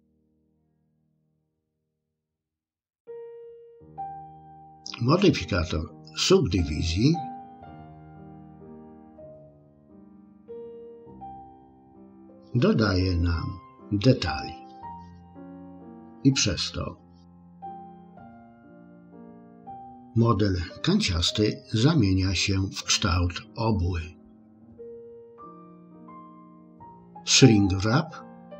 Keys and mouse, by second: 0.8 click, 1.6 click, 3.8 click, 8.7 click, 24.6 click.